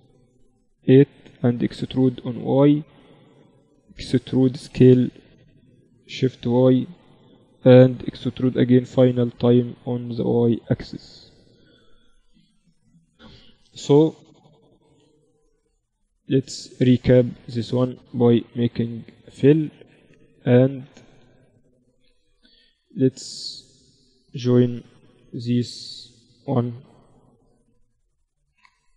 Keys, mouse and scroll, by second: 0.5-3.5 drag, 2.0 e, 4.3 e, 7.9 e, 11.3 Tab, 11.7 click, 12.7 KP_Divide, 13.5 KP_1, 14.3 Tab, 18.3 f, 19.3-21.7 drag, 21.7-22.9 middle drag, 22.9-25.2 right drag, 25.0 KP_1, 25.2 click, 25.2 KP_0, 26.7 j, 27.3-28.9 drag.